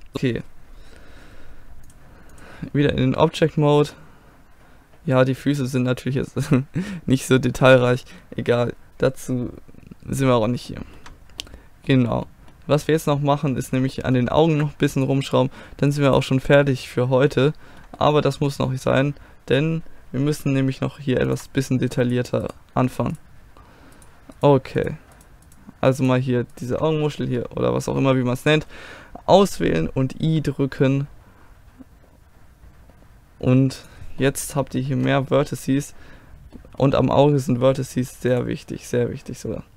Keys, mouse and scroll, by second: 0.1 a, 1.9 click, 2.4-4.0 drag, 4.0-5.8 middle drag, 6.3 middle click, 11.7-14.8 middle drag, 15.0 click, 16.0-17.0 drag, 17.0-21.0 middle drag, 21.3-27.2 drag, 22.1-27.2 right drag, 27.2 middle click, 27.3 click, 28.2-31.1 middle drag, 34.2-36.2 middle drag, 35.4 a, 38.3-39.7 drag.